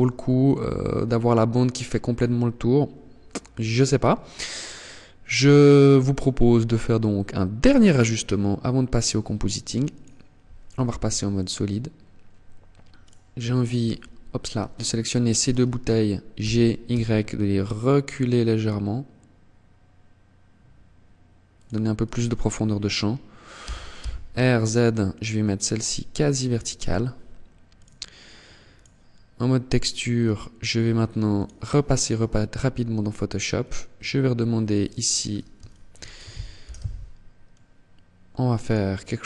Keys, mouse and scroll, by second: 6.5 click, 9.9 ctrl+s, 12.1 right click, 13.9 shift+right click, 15.5 g, 20.7 click, 21.1 right click, 22.6 r, 25.5 click, 26.7 click.